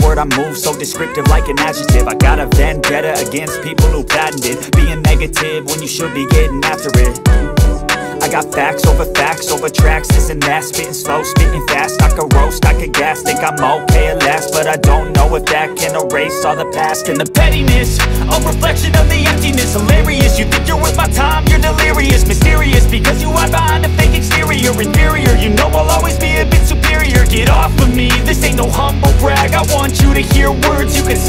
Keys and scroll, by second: 1.3 i, 12.8 shift+F2, 16.2 Escape, 17.7 Delete, 19.1 F2, 22.5 F4, 24.5 e, 25.0 shift+F2, 25.4 Escape, 29.5 c, 30.0 Escape, 30.4 F3, 30.9 Escape.